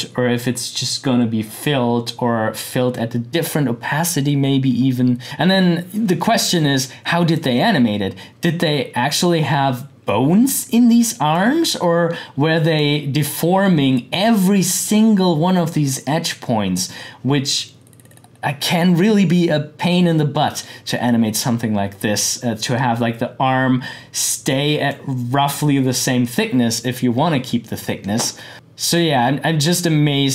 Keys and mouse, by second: 5.2-11.0 drag, 11.3-14.8 drag, 25.7-27.3 drag, 28.5-30.3 drag.